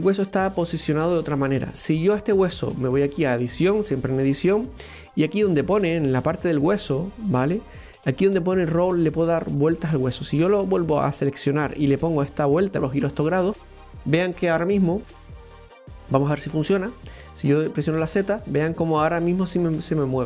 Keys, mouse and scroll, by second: 0.1 right click, 2.8-5.8 drag, 9.1-12.1 drag, 14.5-17.6 drag, 17.7-20.2 drag.